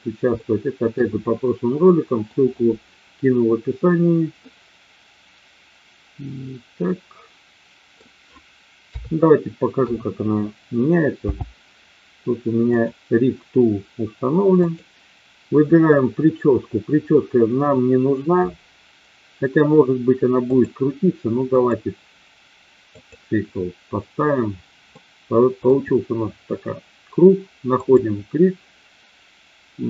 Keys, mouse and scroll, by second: 0.4-1.0 shift+middle drag, 1.9-2.2 middle drag, 4.5-7.9 middle drag, 8.7 KP_3, 9.7 KP_1, 11.1 n, 14.6 click, 20.4-21.7 drag, 22.9 click, 24.9-25.6 middle drag, 27.7 click.